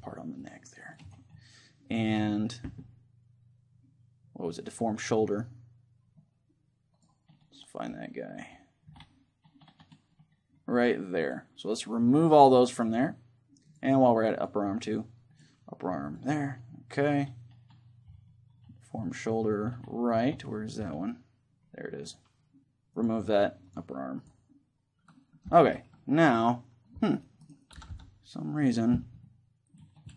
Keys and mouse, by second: 1.2-3.0 right drag, 1.4-4.8 middle drag, 4.8-7.0 drag, 11.3-18.1 drag, 22.1-26.0 drag, 25.6 Tab, 26.0-27.2 middle drag, 27.2-29.2 right drag, 27.8 r, 28.8-30.1 drag, 29.5-30.1 middle drag.